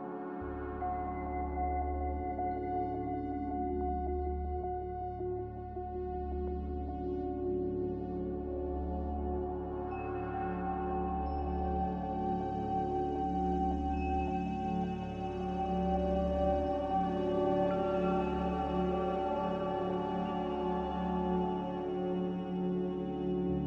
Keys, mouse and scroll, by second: 6.5-7.5 typing, 16.0 ctrl+z, 16.5 ctrl+z.